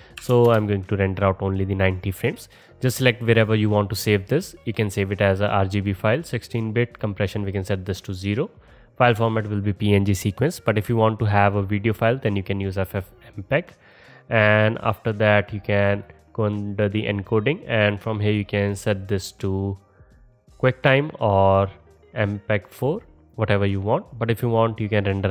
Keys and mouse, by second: 6.1 middle click, 6.8-7.6 middle drag, 11.4-25.3 middle drag.